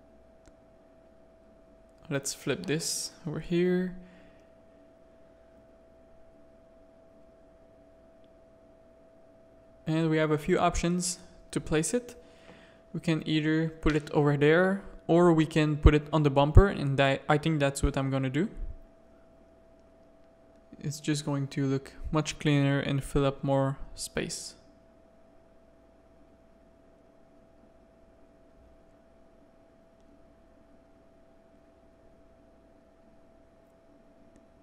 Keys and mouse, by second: 2.2 g, 4.7 s, 5.6 ctrl+z, 6.3 KP_3, 6.8 shift+middle click, 7.1 shift+click, 12.4 click, 12.6 g, 13.9 r, 14.7 alt+a, 15.2 middle click, 16.0 click, 16.5 middle click, 17.1 alt+a, 17.3 click, 17.8 z, 18.8 shift+middle click, 20.2 middle click, 21.0 middle click, 21.7 middle click, 23.0 middle click, 23.7-25.2 middle drag, 25.8 click, 27.2 x, 27.7 middle click, 28.1 click, 28.7 middle click, 29.5-32.9 middle drag, 33.3 middle click, 34.0 click.